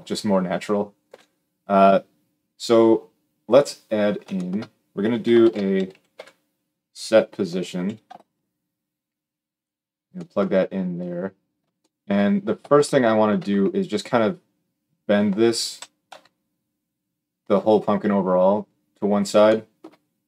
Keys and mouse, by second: 0.8 g, 3.8-4.9 shift+middle drag, 5.2 shift+a, 15.9 KP_3.